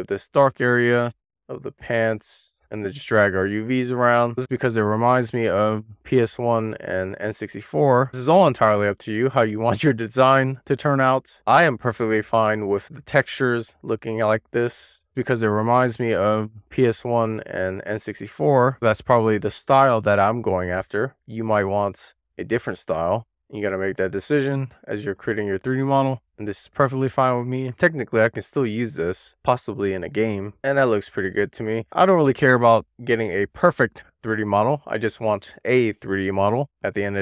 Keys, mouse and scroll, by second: 0.0 shift+click, 0.1-1.4 middle drag, 1.4-2.2 scroll down 3, 1.6 middle click, 2.2 middle click, 3.0-3.5 scroll down 1, 3.5 a, 4.1 scroll up 2, 4.4 click, 4.7 shift+middle click, 5.1 click, 6.7 super+z, 6.8 middle click, 7.0 click, 7.5 click, 8.1 scroll up 2, 8.4 click, 8.7 scroll down 1, 8.8 shift+middle click, 9.3 click, 10.3 scroll up 1, 10.6 click, 11.5 scroll down 2, 11.6 shift+middle click, 11.9 scroll up 1, 12.2 click, 13.2 click, 13.4 click, 14.1 click, 14.7 click, 15.6 shift+middle click, 15.9 click, 17.4 super+z, 17.6 middle click, 17.8 click, 18.2 click, 19.7 middle click, 21.1 click, 23.0 scroll down 1, 23.1 middle click, 23.7 middle click, 24.3 click, 24.7 click, 25.4 super+z, 25.8 super+z, 26.2 middle click, 26.5-27.0 scroll up 1, 27.0 middle click, 27.5-27.9 scroll up 1, 27.9 click, 28.6 super+z, 28.7-29.3 scroll down 1, 29.3 click, 29.6-30.0 scroll down 1, 30.0-30.4 scroll up 1, 30.5 shift+middle click, 30.8 middle click, 31.1-31.8 scroll up 1, 31.8 click, 32.7 super+z, 33.1 middle click, 33.4-33.7 scroll up 1, 33.7 middle click, 34.1-34.5 scroll up 1, 34.5 middle click, 34.8 shift+middle click, 35.2 scroll up 2, 35.4 shift+middle click, 36.3 scroll down 2, 36.5 shift+middle click, 36.8 scroll up 1, 36.9 shift+click.